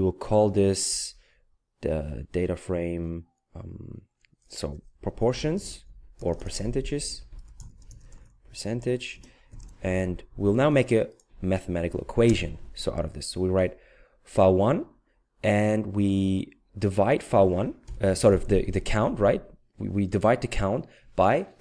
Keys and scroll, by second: 5.1-9.5 typing, 17.8 /.